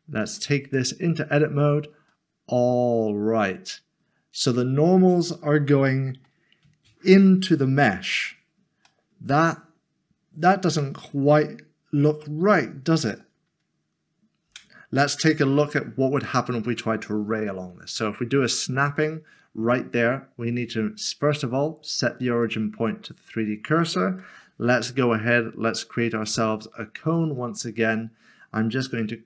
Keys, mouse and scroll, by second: 0.6 Tab, 2.1 middle click, 8.8 middle click, 17.4 Tab, 17.6 shift+right click, 22.4 click, 24.0 s, 24.2 a, 26.2 click.